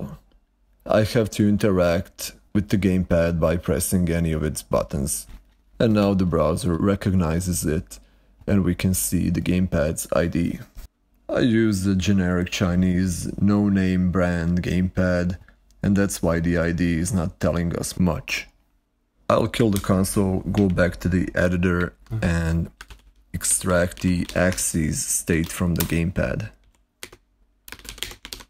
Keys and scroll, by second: 19.6 alt+super+i, 21.1 ctrl+Right, 22.4-25.2 typing, 25.7 Return, 26.4 ], 26.9 Escape, 27.4-28.4 typing.